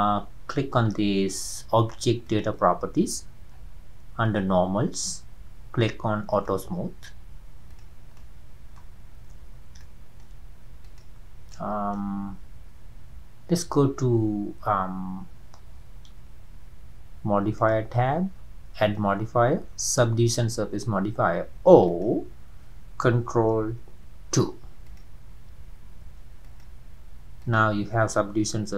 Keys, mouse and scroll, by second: 0.5-1.2 scroll up 1, 2.3 click, 3.5-3.8 scroll down 4, 4.2-6.5 drag, 7.7 drag, 8.1 scroll down 1, 8.2-9.0 middle drag, 9.0 scroll up 2, 9.8-10.4 shift+middle drag, 10.4 scroll up 2, 10.8 click, 11.2 scroll down 2, 11.5-14.6 middle drag, 17.6 click, 21.6-22.0 drag, 24.3 ctrl+2, 24.9 drag, 26.5 ctrl+2, 26.5 drag, 27.0 scroll up 2, 27.4 click, 28.6 Tab.